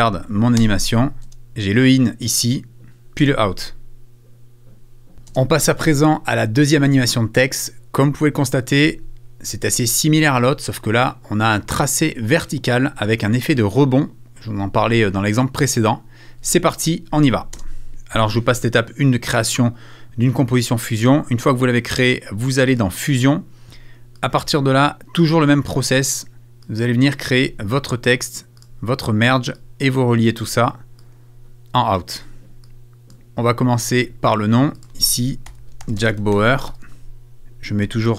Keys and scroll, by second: 35.2-38.1 typing.